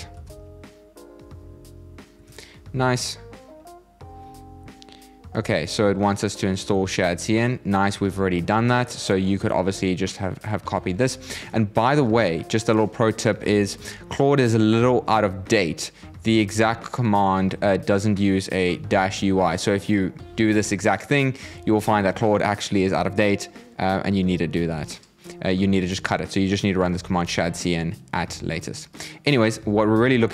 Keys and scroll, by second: 1.5 super+v.